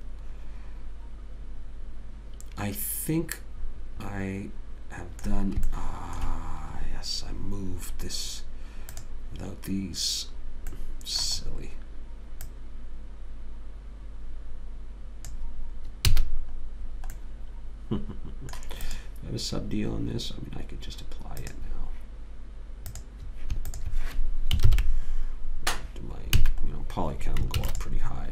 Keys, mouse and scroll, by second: 6.1 middle click, 8.1 middle click, 8.2-9.3 drag, 9.3-10.9 right drag, 10.9 click, 11.1-12.8 middle drag, 12.8 click, 16.4 a, 17.2 middle click, 18.2 middle click, 19.2 click, 25.0 ctrl+j, 26.8 a, 27.1-28.3 middle drag, 27.9 ctrl+s.